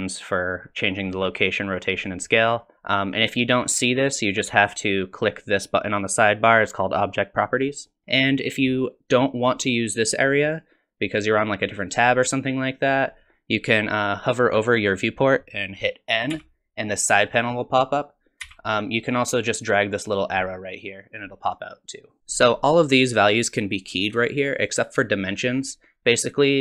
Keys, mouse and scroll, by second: 0.4 click, 1.6 click, 2.6 click, 11.1 click, 11.4 click, 11.9 click, 13.1 click, 16.3 n, 18.4 n, 20.0 click, 24.7 click, 26.0 click.